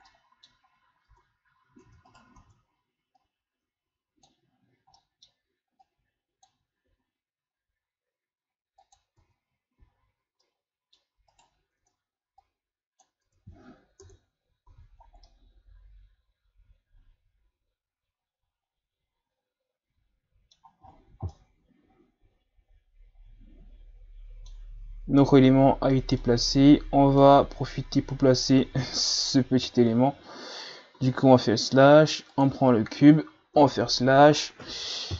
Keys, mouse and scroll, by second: 0.1-0.7 middle drag, 0.7-1.0 scroll up 3, 1.0 Tab, 1.8 Tab, 2.1 right click, 2.4 Tab, 3.2-5.0 drag, 5.0 middle click, 5.8-6.9 drag, 6.9 s, 9.2 Tab, 9.8 a, 10.2 scroll down 1, 10.4-11.3 middle drag, 11.3 right click, 11.8 Tab, 12.4 click, 13.3 Tab, 14.0 KP_Divide, 14.7 a, 15.2-18.3 middle drag, 20.8-21.3 scroll down 6, 21.3-24.3 middle drag, 25.8-26.2 scroll down 1, 26.2-27.6 middle drag, 27.6-28.2 scroll up 1, 28.2-28.5 scroll up 1, 30.9 shift+a, 33.6 KP_Divide, 34.4-35.1 scroll down 4.